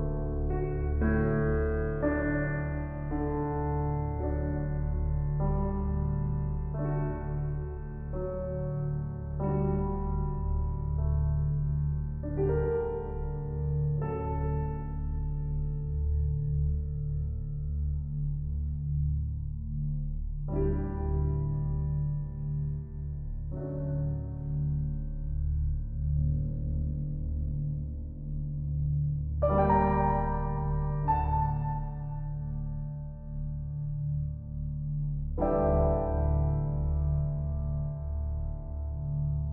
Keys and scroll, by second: 8.7 ctrl+t, 24.3 ctrl+l, 28.9 ctrl+shift+u.